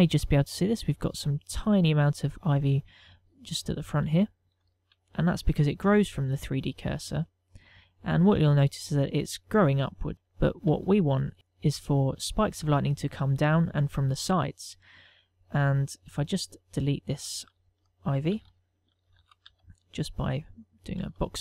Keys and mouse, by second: 3.3 middle click, 4.8 ctrl+middle click, 5.3 shift+middle click, 5.7 ctrl+middle click, 7.3 ctrl+middle click, 10.3 ctrl+middle click, 11.1 shift+middle click, 11.3 ctrl+middle click, 16.0 middle click, 17.5 ctrl+middle click, 17.9 shift+middle click, 18.2 ctrl+middle click, 19.0 z, 19.8 a, 20.1 b.